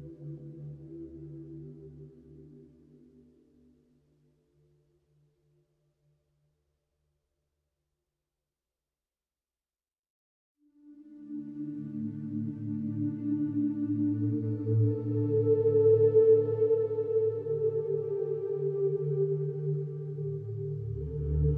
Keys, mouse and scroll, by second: 1.6 click, 2.3 click, 2.7-4.3 scroll, 4.5-7.5 scroll, 7.5 click, 8.1 click, 8.5-10.1 scroll, 10.1-12.5 scroll, 12.5 click, 13.3 click, 13.7-16.2 scroll, 16.6-17.7 scroll, 18.2 click, 18.9 click, 19.2-20.7 scroll.